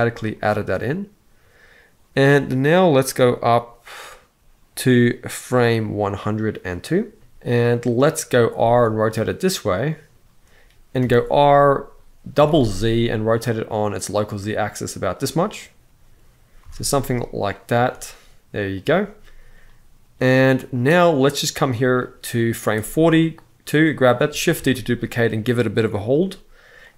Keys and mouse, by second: 0.0-7.0 drag, 7.4 click, 8.3 r, 10.7 r, 12.1 z, 12.2 z, 16.3 r, 16.5 r, 17.4 r, 21.6 click, 22.6 click, 24.3 shift+d, 25.8-26.9 drag.